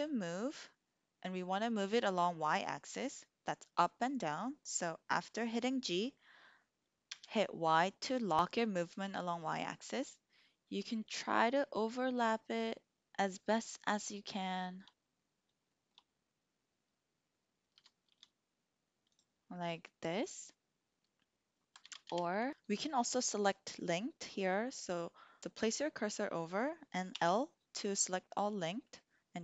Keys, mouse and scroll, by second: 7.0 y, 14.4 shift+click, 14.6 shift+middle click, 15.8 shift+click, 17.7 g, 18.0 y, 19.1-19.4 drag, 22.1 ctrl+z, 27.0 l.